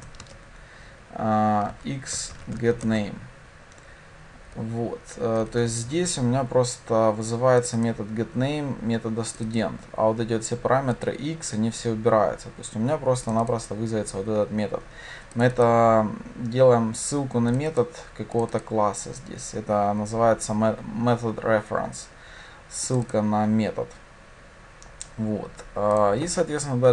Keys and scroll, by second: 2.9 Return.